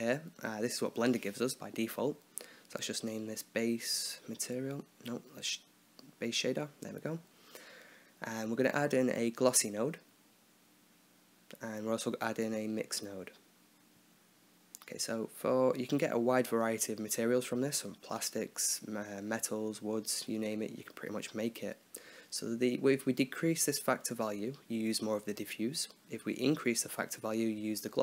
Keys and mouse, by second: 2.1-3.1 drag, 5.4 BackSpace, 7.5-10.0 right drag, 8.1 shift+a, 11.6 shift+a, 15.5-17.6 drag, 20.5-22.4 drag, 22.5-25.0 drag, 25.9-27.0 drag.